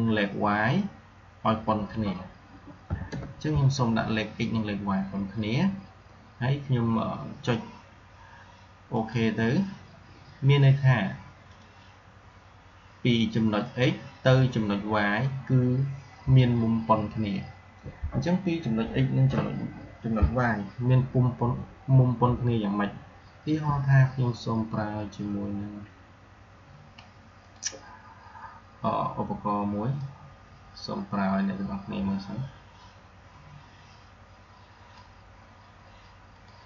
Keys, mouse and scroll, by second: 8.8 click, 11.3 click, 23.3 r, 27.3 click, 29.8-36.6 drag.